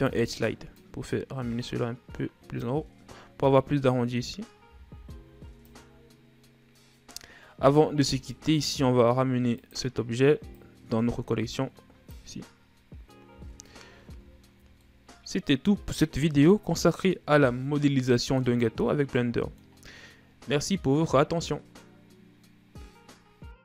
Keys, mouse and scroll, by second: 5.2 a, 5.5 a, 7.8-8.6 scroll down 5, 8.6-10.1 middle drag, 10.1-13.8 drag, 13.8 a, 14.8-15.3 shift+scroll up 1, 15.3-18.3 middle drag, 18.9-21.9 middle drag.